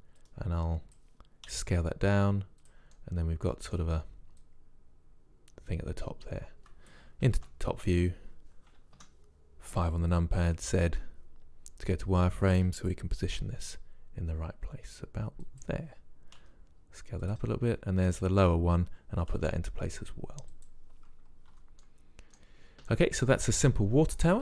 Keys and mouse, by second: 0.3-2.2 drag, 1.6 s, 3.0-3.4 drag, 4.5 click, 7.5 KP_7, 9.1 KP_5, 10.6 z, 13.4 g, 16.5 s, 18.2-19.4 drag, 19.4 g, 21.6 z, 21.9-23.6 middle drag.